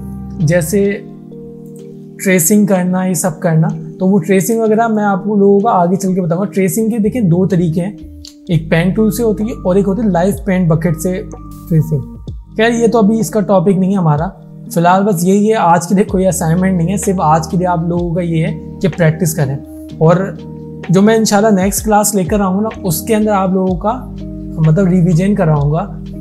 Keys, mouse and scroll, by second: 0.6 click, 4.2 alt+scroll down 1, 4.7 space, 4.8 click, 5.9 alt+scroll down 1.